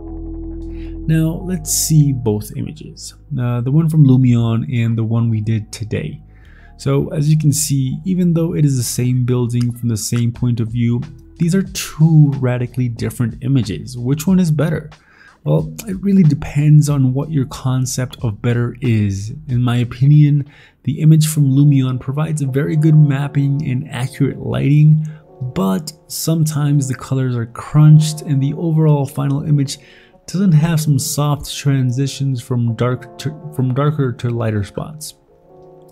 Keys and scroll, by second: 0.3 ctrl+s.